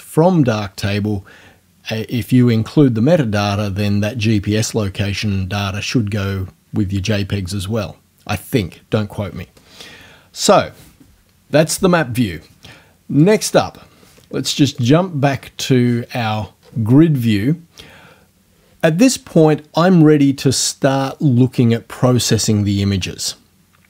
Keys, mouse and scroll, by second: 13.2 click, 14.8 click, 16.2-16.9 scroll up 4, 17.3-17.6 scroll up 2, 18.0 scroll up 2.